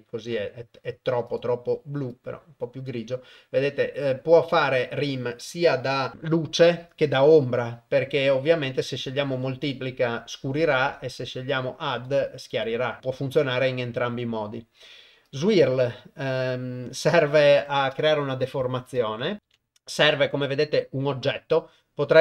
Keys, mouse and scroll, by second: 1.3 drag, 9.1 click, 12.0 click, 13.0-15.4 drag.